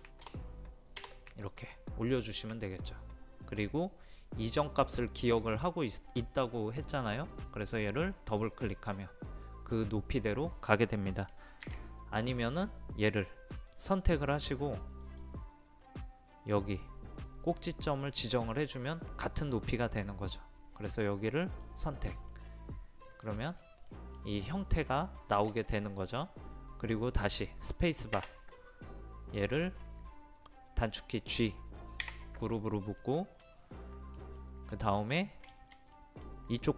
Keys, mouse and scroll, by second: 2.1-6.6 middle drag, 8.3-9.6 drag, 11.7 ctrl+z, 13.7 click, 22.3 middle click, 23.3-23.9 scroll down 1, 23.9 middle click, 28.9-30.6 drag, 32.0 a, 33.0-36.0 middle drag.